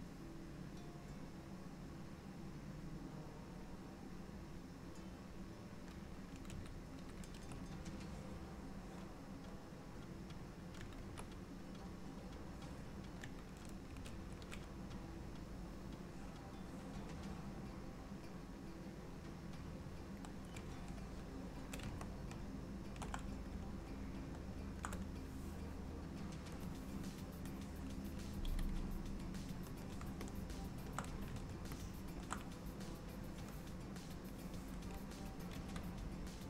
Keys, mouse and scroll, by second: 4.2 click, 6.7 ctrl+z, 7.2 ctrl+z, 9.8 click, 11.2 ctrl+z, 12.1 click, 14.1 ctrl+z, 15.3 alt+middle click, 21.2 shift+middle click, 22.1 ctrl+middle click, 24.0 shift+middle click, 26.7 click, 28.5 f, 30.4 shift+middle click, 31.8 ctrl+middle click, 34.4 click, 35.7 f.